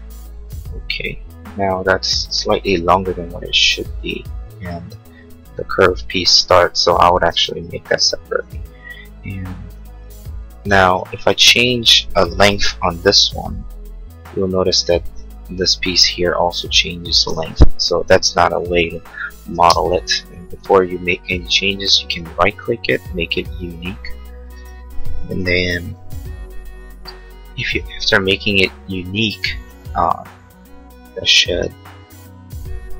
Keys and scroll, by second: 7.3 Escape, 19.4 Escape, 19.6 space, 19.9 Escape, 25.9 p.